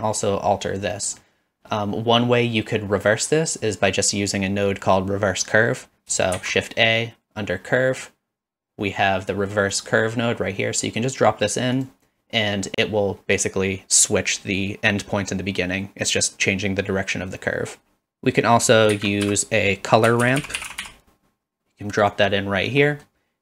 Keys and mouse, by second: 1.0 middle click, 6.4 shift+a, 18.9 shift+a, 20.8 r, 22.9 middle click.